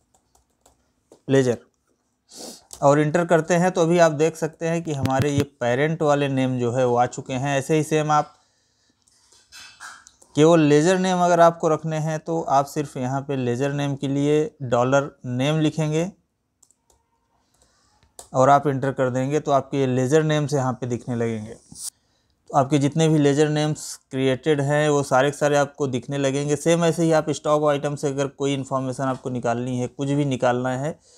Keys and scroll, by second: 4.1 Right, 8.7 ctrl+n, 8.9 Up, 9.8 Right, 11.5 Right, 13.3 Delete, 21.8 Down.